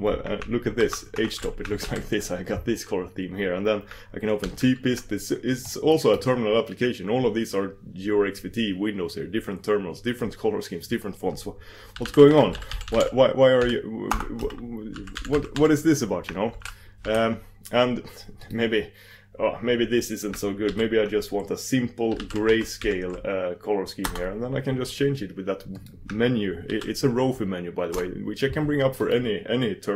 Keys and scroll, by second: 0.8 ctrl+shift+Escape, 1.9 super+j, 4.5 super+v, 17.1 super+v, 23.3 super+d, 26.8 super+d.